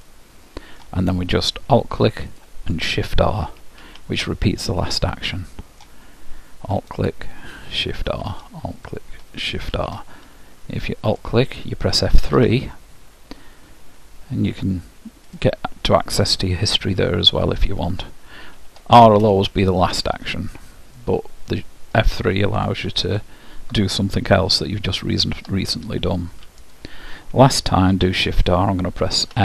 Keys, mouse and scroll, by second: 0.1-2.3 middle drag, 2.3-4.3 drag, 3.9 shift+r, 4.9-6.9 middle drag, 6.9-8.7 drag, 8.1 shift+r, 8.8-10.5 drag, 9.8 shift+r, 11.1-12.9 drag, 12.3 F3, 17.3-18.9 drag, 18.6 shift+r, 19.1 click, 19.7-22.8 middle drag, 23.1-24.9 drag, 25.3 shift+r, 26.6-28.5 drag, 28.1 shift+r, 29.3 f.